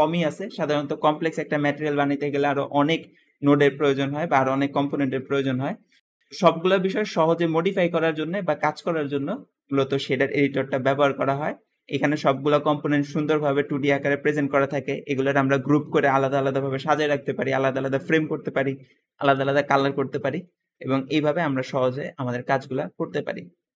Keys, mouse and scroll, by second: 0.5 middle click, 6.6-7.1 scroll up 2, 7.0 middle click, 7.6-9.3 middle drag, 7.6 scroll, 8.2 scroll, 8.6-9.3 scroll down 2, 9.7 middle click, 10.3 middle click, 13.4 middle click, 13.6 scroll down 2.